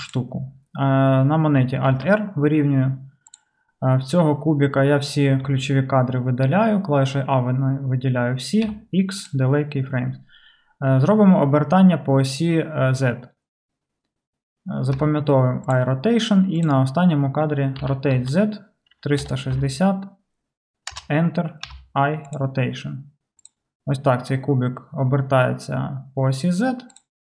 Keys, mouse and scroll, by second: 0.1-3.4 middle drag, 1.9 alt+r, 3.4 click, 3.4-16.7 middle drag, 5.5 a, 8.7 x, 15.0 i, 16.7-27.2 drag, 17.9 r, 21.7 i.